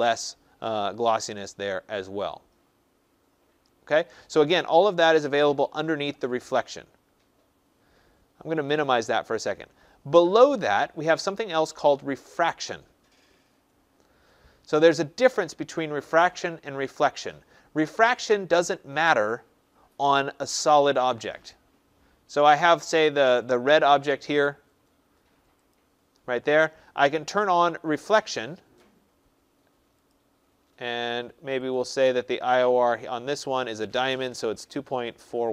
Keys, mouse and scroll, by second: 8.7 click, 12.6 click, 18.6 click, 20.5 click, 25.6 click, 28.0 click, 30.0 click, 31.7 click, 32.7 click, 33.7 click, 34.0-35.5 typing.